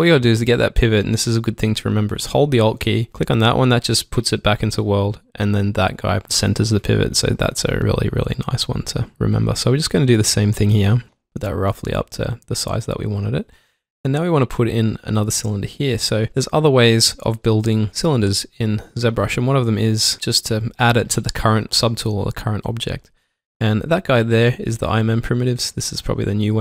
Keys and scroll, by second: 12.8 alt+Num_Lock.